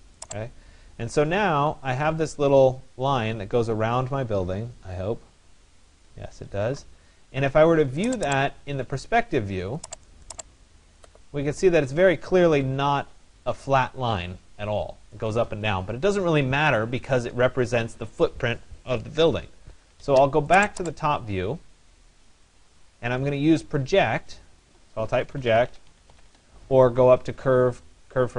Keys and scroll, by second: 25.9 Return.